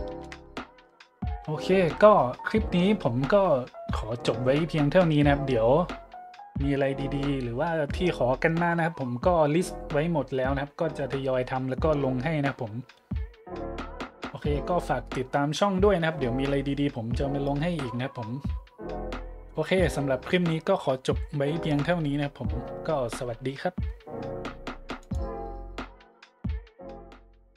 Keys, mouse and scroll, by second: 0.4 shift+a, 25.0 click.